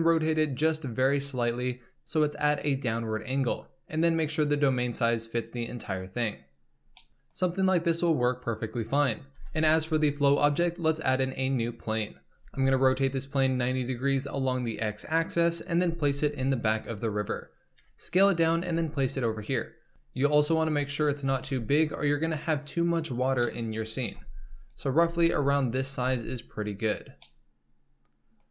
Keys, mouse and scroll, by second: 4.6 click, 6.7 scroll down 2, 6.9-9.0 middle drag, 9.4 shift+a, 12.3 r, 16.1 s, 17.8 KP_7, 18.7 g, 19.9 s, 20.5 s, 23.4-24.1 shift+middle drag, 24.1 g, 25.0 s, 26.0 g, 27.2-28.5 middle drag.